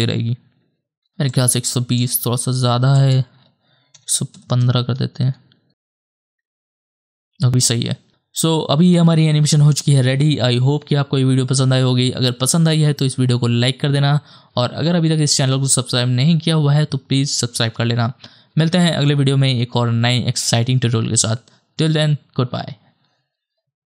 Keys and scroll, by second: 4.0 KP_1, 4.1 KP_1, 4.3 KP_5, 4.6 Return, 5.2 KP_0, 7.5 KP_0, 8.1 KP_0.